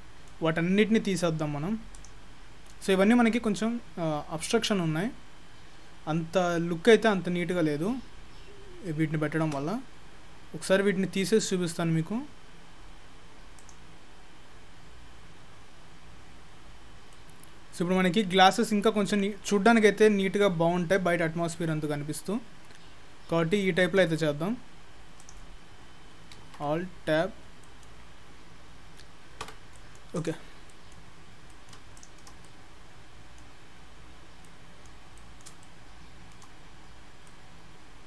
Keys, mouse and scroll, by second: 27.7 middle click, 29.5 Tab, 29.8 middle click, 30.2 click, 30.8 middle click, 31.2-31.8 scroll down 7, 31.5 middle click, 32.0 shift+click, 32.5 middle click, 33.6-34.2 scroll up 10, 34.5 middle click, 35.2 middle click, 35.7 shift+middle click, 36.3 shift+middle click, 36.6-38.0 scroll down 11, 37.3 middle click.